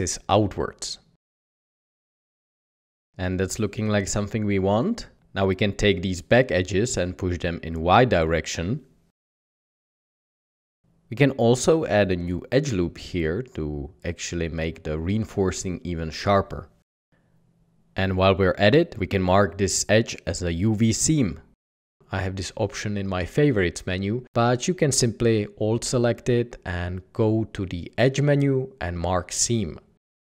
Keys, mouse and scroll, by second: 0.4 alt+a, 2.0 Tab, 5.9 g, 6.0 y, 6.9 Tab, 7.3 Tab, 8.0 typing, 8.4 Escape, 9.1 ctrl+r, 10.0 Escape, 11.9 ctrl+r, 16.6 Tab, 17.8 Tab, 23.0 g, 28.9 ctrl+b.